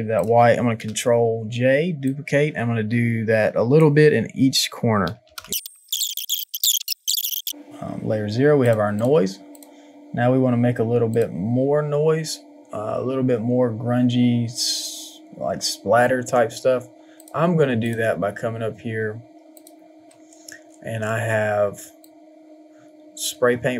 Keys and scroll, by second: 0.7 ctrl+j, 5.6 ctrl+alt+g, 5.7 ctrl+j, 5.9 ctrl+t, 6.1 Return, 6.4 Return, 6.5 ctrl+j.